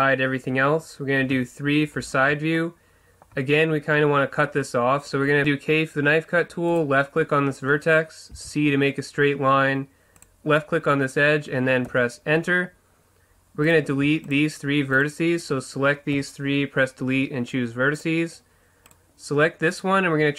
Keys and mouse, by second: 1.3 KP_3, 5.4 k, 13.8-18.1 right drag, 16.3 Delete, 19.0-20.3 right drag.